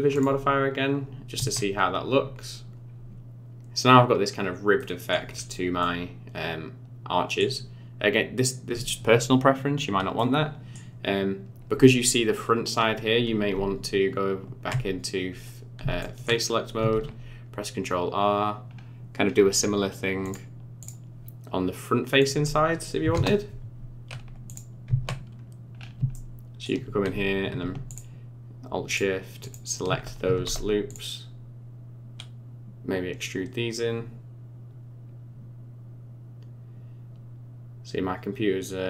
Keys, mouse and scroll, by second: 0.4 click, 1.3 Tab, 2.1-3.1 scroll down 12, 4.8 middle click, 5.3-5.8 scroll down 2, 5.8 middle click, 8.1-8.4 scroll up 1, 10.2 middle click, 13.5 Tab, 16.0 shift+middle click, 16.4 scroll up 3, 16.9 ctrl+r, 22.2 click, 24.4 click, 24.8 Tab, 25.7 scroll up 5, 26.1 shift+middle click, 27.9 alt+shift+click, 28.9 alt+shift+click, 29.4 alt+shift+click, 30.3 alt+e.